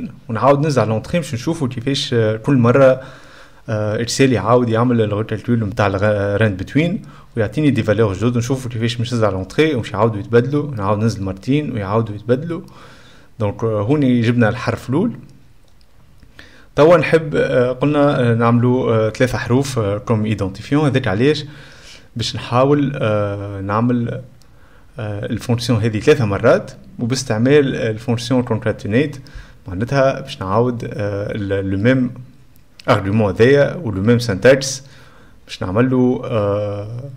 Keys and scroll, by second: 0.2 F11, 0.3 BackSpace, 0.4 Left, 0.7 Return, 1.0 ;, 7.0-8.5 typing, 8.8 Return, 9.4 Return, 11.9 Return.